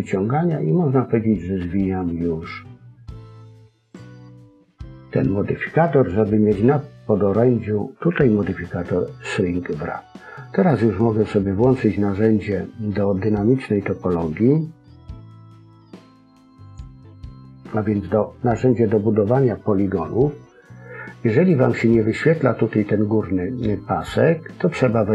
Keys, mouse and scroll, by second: 3.8 click, 16.6 click.